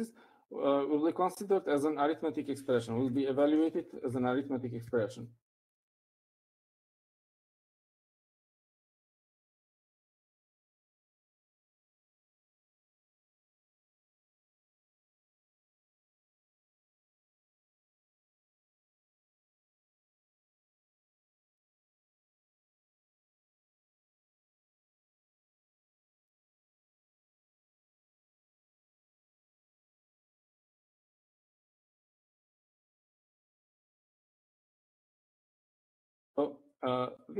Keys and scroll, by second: 5.0 5, 5.3 shift+8, 6.0 space, 6.5 7, 7.6 Right, 9.8-13.0 typing, 23.0-24.8 typing, 26.1-27.6 typing, 32.3-35.5 typing.